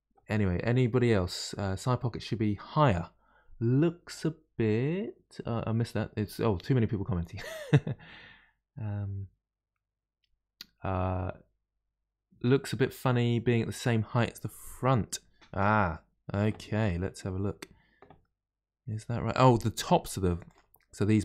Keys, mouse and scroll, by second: 17.4 scroll down 2, 18.1-20.4 middle drag, 20.4 click, 21.0 shift+click.